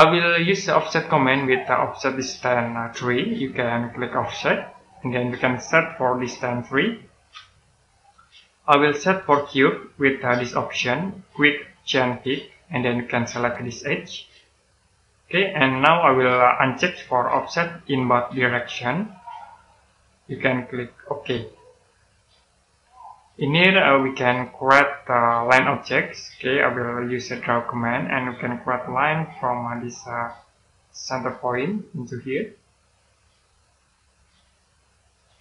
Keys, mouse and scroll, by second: 4.5 click, 7.1 3, 7.9 click, 19.1 click, 21.0 middle click, 27.3 click, 28.2-29.8 scroll up 1, 31.5 click, 34.4 click, 35.3 middle click.